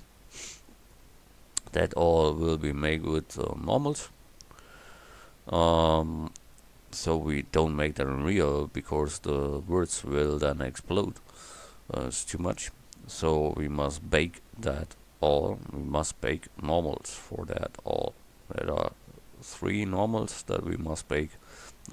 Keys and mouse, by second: 1.3 middle click.